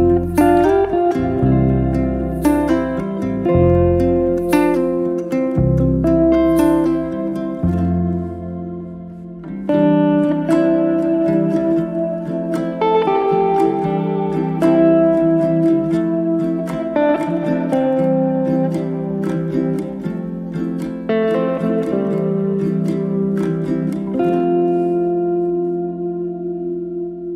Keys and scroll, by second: 4.8 c, 7.6 Return, 11.6 0, 11.9 KP_Decimal, 12.6 Return, 13.2 space, 16.1 p, 17.6 Return, 18.1 space, 22.1 e, 27.0 space.